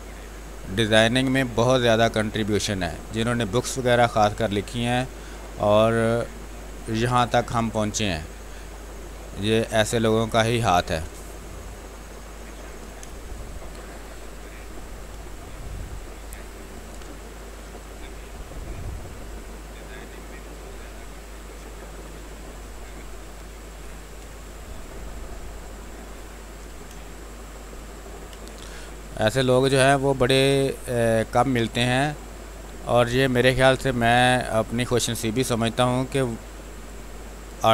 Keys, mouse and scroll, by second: 0.6 space, 0.8 click, 1.8 click, 2.6 space, 2.8 click, 3.1 space, 4.2-6.9 drag, 6.9 space, 7.3 alt+click, 8.6-12.6 drag, 12.6 ctrl+d, 13.0 space, 13.2 click, 13.5 space, 14.3 w, 14.9 click, 15.3 ctrl+space, 16.2 click, 16.7 ctrl+d, 18.1 click, 19.0 space, 19.4 click, 19.5 space, 21.7 click, 22.1 space, 22.6 ctrl+click, 24.2 ctrl+d, 24.9 click, 26.5 b, 26.9 space, 27.1 ctrl+click, 28.8 space, 29.6-33.7 drag, 33.7-36.7 drag, 36.7-37.7 drag.